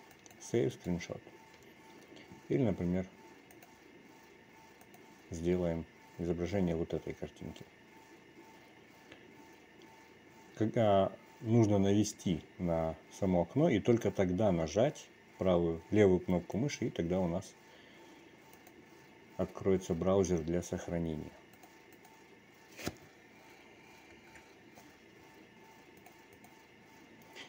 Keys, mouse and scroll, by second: 4.6-17.3 drag.